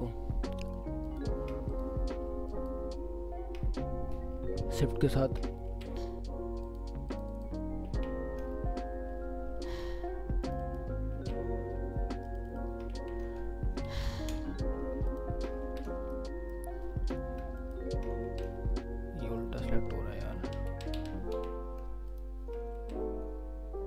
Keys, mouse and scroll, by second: 1.0 shift+click, 3.6 shift+scroll down 2, 3.7 scroll up 1, 4.3 scroll up 1, 4.9 shift+click, 5.7 ctrl+z, 6.6 ctrl+click, 7.3 ctrl+double click, 7.9 ctrl+z, 8.4 ctrl+w, 8.4 scroll down 2, 9.0 scroll up 1, 9.7 ctrl+click, 11.1 ctrl+z, 12.2 ctrl+shift+click, 12.9 ctrl+z, 13.3 scroll down 1, 13.9 ctrl+z, 15.1 shift+click, 15.6 ctrl+z, 16.1 alt+middle click, 16.9 scroll up 1, 17.6 shift+click, 18.2 ctrl+z, 18.5 scroll down 1, 19.2 scroll up 1, 20.7 ctrl+z, 22.1 shift+click, 22.7 ctrl+z.